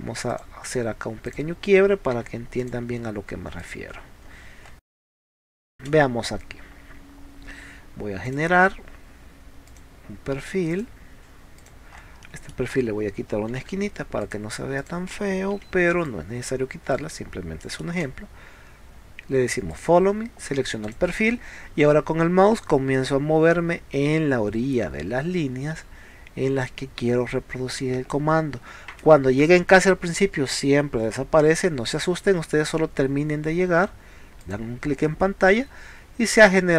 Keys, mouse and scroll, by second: 0.3 click, 1.3 click, 2.3 p, 2.6 click, 3.6 click, 4.0 middle click, 5.2 middle click, 5.8 space, 8.3 click, 9.7 click, 10.8 click, 11.6 click, 12.2 middle click, 12.8 scroll up 1, 13.6 l, 14.2 click, 14.8 click, 15.6 e, 16.1 click, 16.9 scroll down 1, 17.2 scroll up 1, 18.0 space, 19.7 click, 20.9 click, 21.2 middle click, 34.4 click, 35.1-36.4 middle drag.